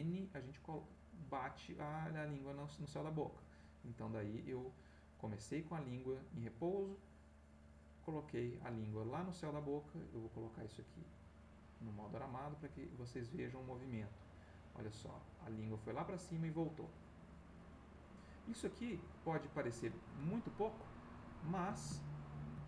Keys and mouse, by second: 1.7-4.2 drag, 4.7 click, 6.9-8.7 drag, 11.1 click, 12.8-20.0 drag, 20.6-21.8 ctrl+middle drag, 22.0 ctrl+shift+middle click.